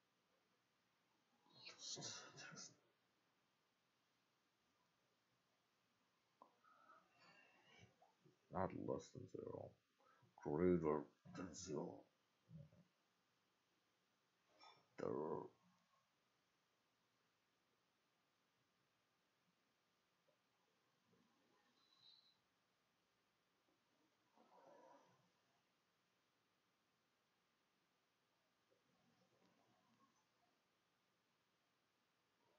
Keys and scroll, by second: 12.2 =, 12.3 BackSpace, 12.5 Delete, 13.1 BackSpace, 13.5 Delete, 14.8 shift+Up, 15.0-16.7 typing, 19.6 ctrl+shift+z, 19.7 ctrl+shift+x, 19.8 ctrl+shift+c, 19.9 ctrl+shift+f, 20.1 ctrl+shift+d, 20.3 ctrl+shift+s, 21.1 2.